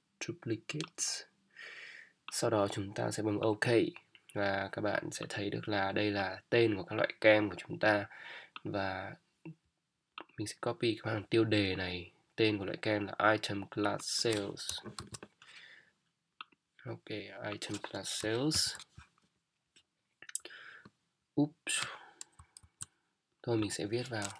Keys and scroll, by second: 15.0 ctrl+c, 22.6 ctrl+z.